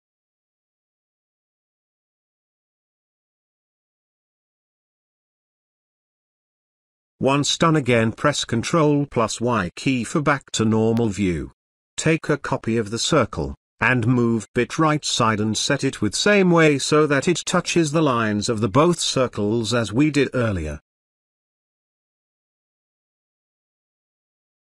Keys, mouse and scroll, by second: 4.0 ctrl+alt+click, 5.1-6.3 ctrl+alt+drag, 8.6 ctrl+y, 9.3 space, 9.5 click, 9.8 space, 11.4-18.2 alt+drag, 14.8-18.2 alt+drag, 18.6 space, 19.1-20.1 ctrl+click, 21.7 ctrl+y, 22.8 ctrl+space, 23.2 ctrl+click, 23.5 ctrl+space, 24.4 click.